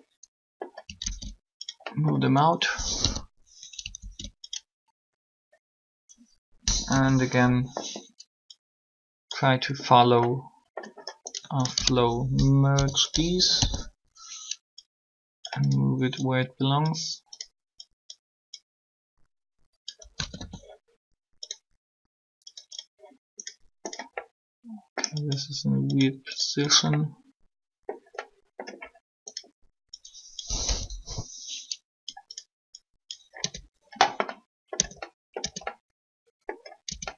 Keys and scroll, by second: 2.9 1, 6.6 3, 12.7 shift+0, 13.5 1, 19.8-20.3 typing, 30.3 1, 33.4 Tab, 34.7 Tab, 35.4 Tab, 36.8 Tab.